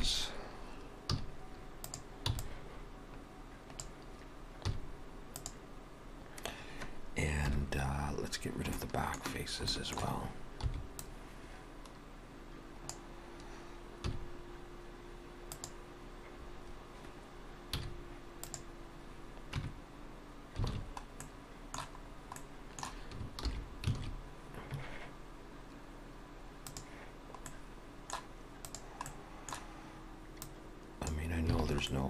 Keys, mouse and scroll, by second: 0.0 KP_3, 1.2 z, 2.3 b, 4.7 x, 7.4 KP_1, 8.4-8.8 scroll down 3, 8.8 shift+middle click, 10.0 shift+middle click, 10.7 b, 14.1 x, 17.8 z, 19.6 Tab, 20.7 alt+a, 21.2 middle click, 22.1 scroll down 2, 22.4 middle click, 23.5 alt+h, 24.0 alt+a, 26.7 click, 27.5 middle click, 28.7 click, 29.1 middle click, 30.5 click, 31.6 alt+a, 31.9 middle click.